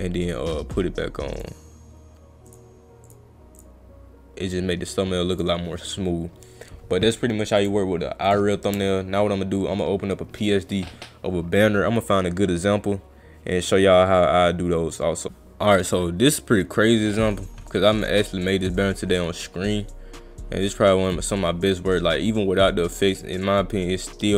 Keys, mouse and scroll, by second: 1.4 click, 2.5 click, 3.1 click, 3.6 click, 5.4 click, 7.6 click, 8.3 click, 18.0 click, 18.5 click, 20.6 click, 21.1 click, 23.2 click, 24.1 click.